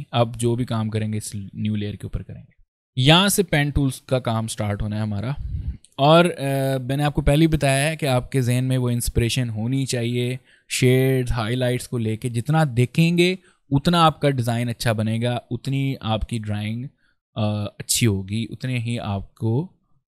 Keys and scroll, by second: 2.7 ctrl+space, 3.6 ctrl+space.